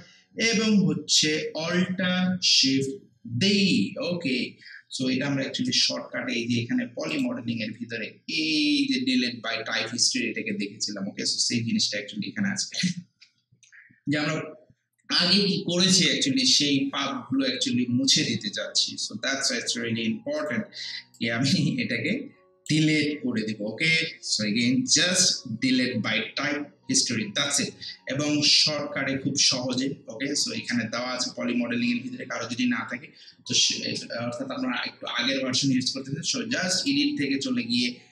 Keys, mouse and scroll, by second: 5.3 click, 5.6 ctrl+space, 7.1 click, 20.4-24.9 drag, 36.8 click.